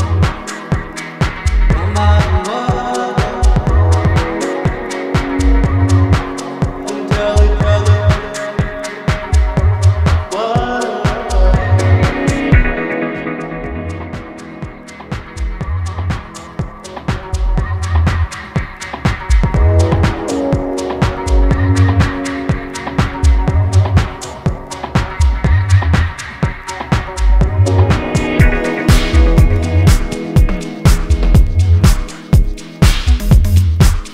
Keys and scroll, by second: 17.5 ctrl+j, 21.5 ctrl+t.